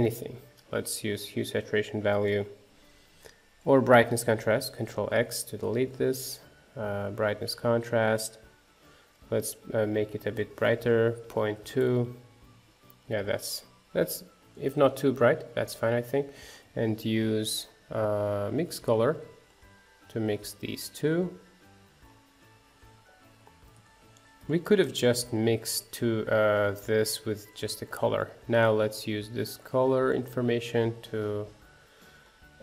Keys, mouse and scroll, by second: 2.0-2.7 scroll up 2, 3.3 click, 4.4 ctrl+x, 6.9 shift+a, 8.0-10.7 scroll up 5, 11.4-12.5 drag, 12.5 scroll down 2, 12.8-18.7 middle drag, 18.7 shift+a, 20.4-21.7 drag, 22.0-22.3 scroll down 3, 23.7 ctrl+shift+click, 28.2-29.6 drag, 30.1-31.8 drag.